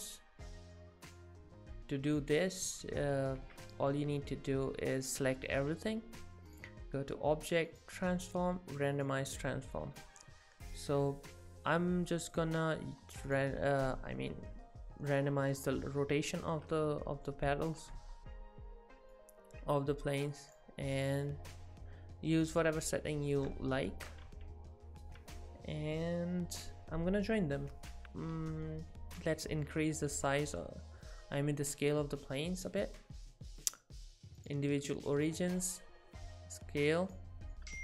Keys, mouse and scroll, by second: 0.7 middle click, 1.6 z, 2.0 scroll down 3, 2.0 z, 2.3 middle click, 2.8 z, 3.4 z, 5.2 a, 5.6 a, 6.5 click, 10.0 middle click, 12.5 click, 19.2 click, 21.3 click, 23.3 middle click, 24.3 Tab, 25.2 Tab, 27.9 ctrl+j, 28.0 Tab, 28.0 middle click, 28.3 a, 29.2 scroll up 2, 30.0 middle click, 33.7 click, 35.4 s, 37.3-37.7 scroll down 4, 37.5 middle click.